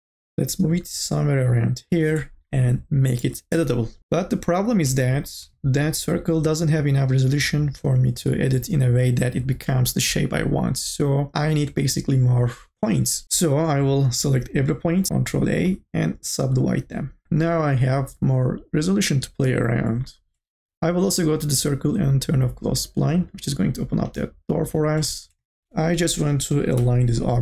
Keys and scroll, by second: 3.5 c, 13.2 ctrl+z, 15.1 ctrl+a, 17.2 1, 25.6 r, 26.7 4.